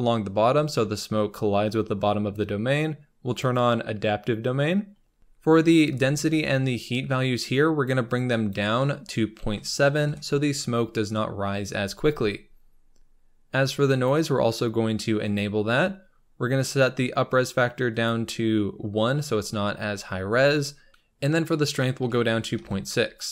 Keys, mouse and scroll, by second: 3.2-15.2 drag, 18.1-22.6 drag.